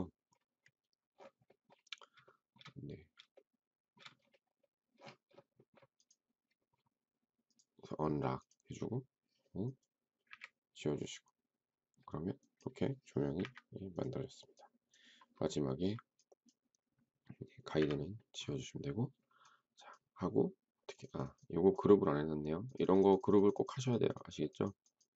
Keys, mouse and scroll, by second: 2.2 shift+middle click, 3.3 shift+middle click, 10.2 Delete, 13.4 Delete, 17.6 Delete.